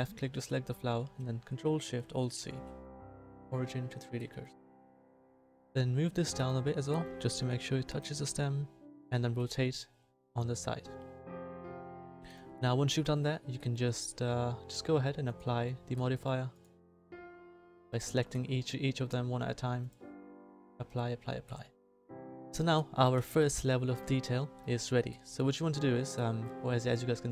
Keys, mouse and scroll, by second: 0.7-2.1 middle drag, 9.2 r, 16.5 middle click, 17.6-19.0 middle drag, 20.6 middle click, 21.4 middle click, 23.1 a.